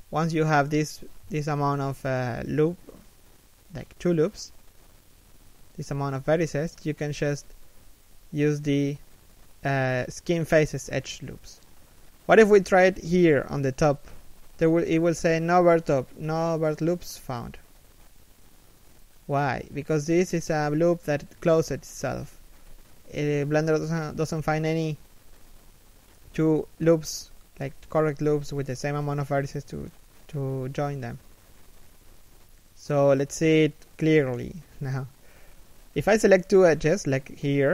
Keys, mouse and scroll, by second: 1.3 scroll down 2, 1.6 shift+middle click, 1.9 z, 2.2 middle click, 2.7 z, 3.2 KP_1, 4.1 middle click, 4.5 a, 4.9 alt+right click, 6.0 alt+shift+middle click, 6.2 z, 6.5 middle click, 6.9 scroll up 1, 7.5 shift+middle click, 9.6 f, 17.4 z, 17.7 middle click, 21.8 shift+middle click, 23.5 middle click, 24.1-24.6 scroll down 1, 25.0 middle click, 26.7 middle click, 30.0 right click, 30.4 z, 30.9 shift+right click, 31.4 middle click, 32.7 shift+middle click, 34.0 f, 35.4 z.